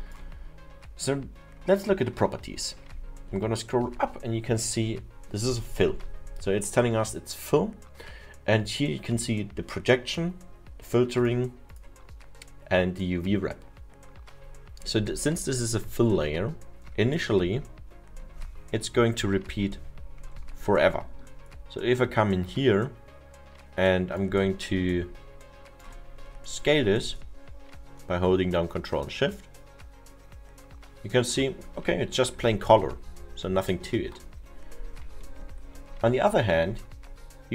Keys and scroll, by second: 19.6 F1, 33.0 ctrl+z, 33.5 ctrl+z, 35.2 ctrl+z.